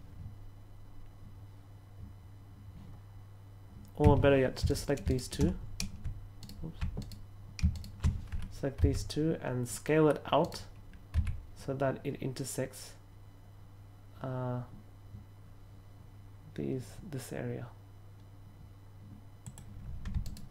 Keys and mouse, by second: 3.9 a, 6.9 alt+right click, 7.6 alt+shift+right click, 8.7 s, 10.3 right click, 11.1 s, 19.3 click.